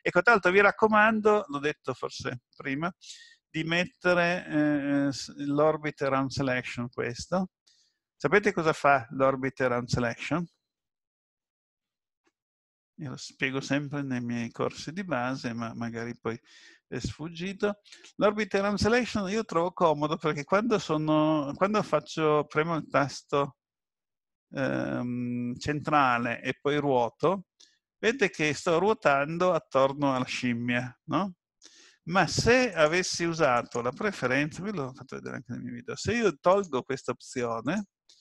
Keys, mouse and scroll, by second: 25.8 middle click, 28.5 click, 29.0 middle click, 32.7 click.